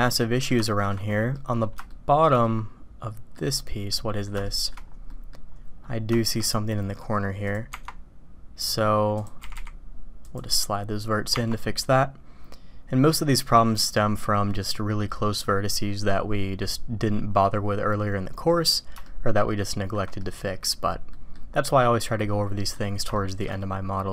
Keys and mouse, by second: 0.7 shift+drag, 1.3 middle click, 1.9-2.2 shift+middle drag, 2.4-3.3 middle drag, 3.3 click, 3.9 middle drag, 4.4 shift+middle drag, 5.1 middle drag, 6.1 shift+middle drag, 6.7 middle click, 9.4 g, 11.3 Tab, 16.1 drag, 16.7 click, 16.7-18.5 middle drag, 19.0-19.9 shift+middle drag, 20.2 middle drag, 20.4 drag, 21.1 middle drag, 21.8-22.8 drag, 23.1 shift+drag, 23.6-24.0 drag.